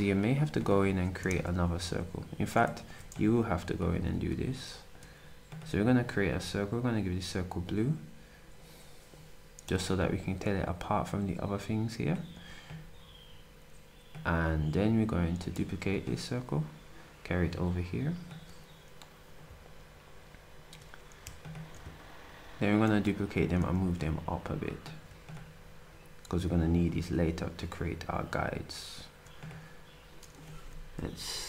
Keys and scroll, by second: 3.9 d, 15.8 d, 23.7 ctrl+shift+d.